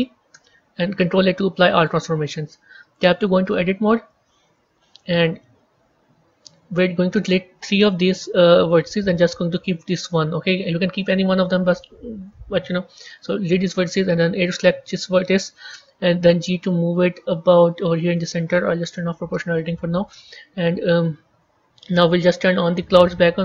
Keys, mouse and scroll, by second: 1.6 ctrl+a, 2.0-2.3 scroll up 4, 2.9 b, 3.2 scroll up 1, 3.3-4.5 middle drag, 4.5 KP_1, 5.3 shift+middle click, 6.6-7.4 scroll up 3, 7.7 click, 8.6 shift+click, 9.4 shift+click, 22.6 click, 23.2-23.4 scroll down 8.